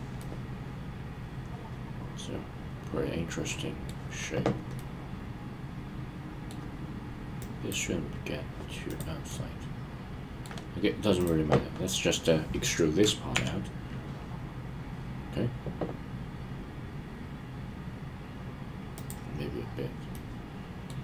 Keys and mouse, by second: 0.2-3.8 middle drag, 4.8-6.5 middle drag, 7.3-7.7 drag, 8.8 click, 9.2-10.4 middle drag, 13.3 e, 20.1-20.9 middle drag.